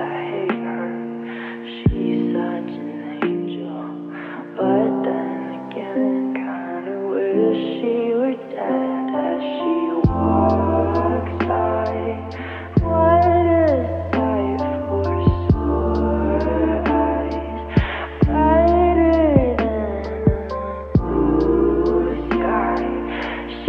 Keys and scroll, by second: 2.5-3.9 typing, 3.9 Return, 17.9 0, 18.7 -.